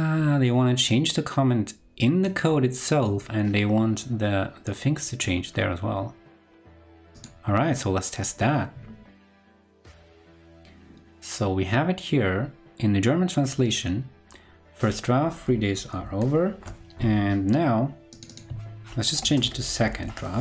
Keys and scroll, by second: 16.1 ctrl+super+Left.